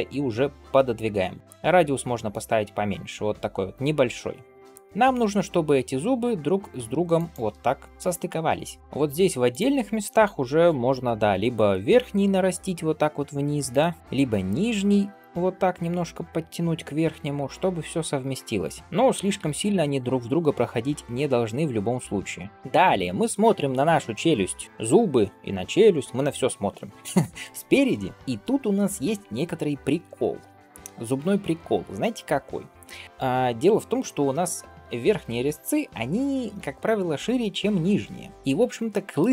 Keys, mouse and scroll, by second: 7.9 shift+middle click, 8.1-8.8 scroll up 1, 9.3 click, 11.0-12.1 scroll up 1, 12.1 g, 14.5 alt+q, 15.0 click, 16.0 click, 17.0 g, 18.8 click, 19.2 g, 22.2 click, 28.0 middle drag, 28.1-29.1 scroll up 2, 38.7 middle drag.